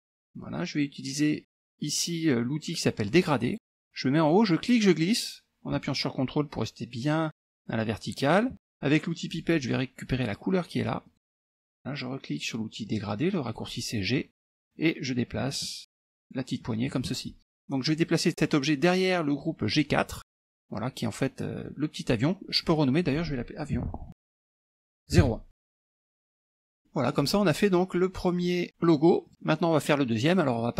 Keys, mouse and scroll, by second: 3.5 click, 4.6-8.5 drag, 9.3 click, 11.1 click, 13.5 click, 14.6-17.1 drag, 20.1-21.2 drag, 21.6 click, 22.7 click, 23.6-25.2 typing, 26.6 click, 26.9 middle click, 27.7 click, 29.5 middle click, 30.1-30.7 scroll up 2.